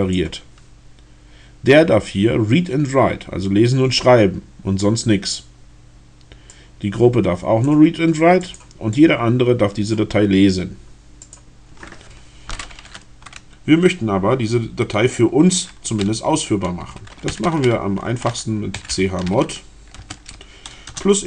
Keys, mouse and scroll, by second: 6.6-7.9 drag, 8.4 click, 8.9-10.1 drag, 11.3 middle click, 17.1-19.9 typing, 20.7 KP_Add.